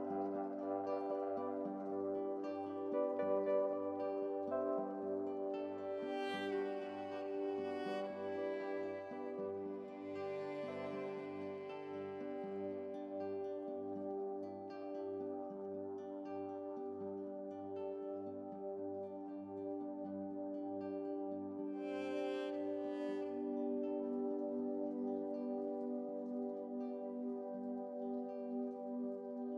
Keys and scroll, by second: 28.1 Up, 28.1-29.0 Right, 29.0 Up, 29.1 Up, 29.4 Up.